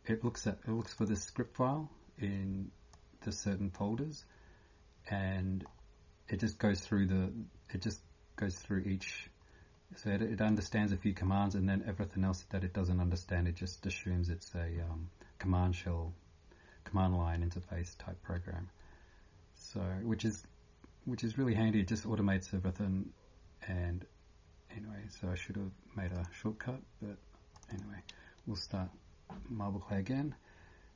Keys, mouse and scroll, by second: 1.0 click, 1.1 click, 5.7 scroll down 1, 7.8 click, 8.2 scroll down 6, 9.2 scroll down 1, 10.5 click, 10.5 scroll down 1, 11.3 scroll down 1, 14.6 scroll down 1, 18.8 scroll down 1, 20.8 scroll down 3, 27.5 click.